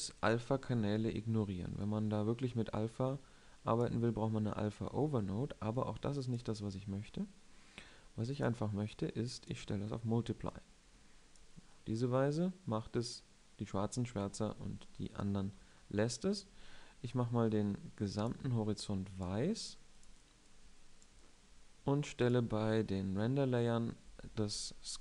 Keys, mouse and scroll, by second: 7.4-8.4 drag, 10.8 middle click, 13.0 middle click, 15.0-17.0 middle drag.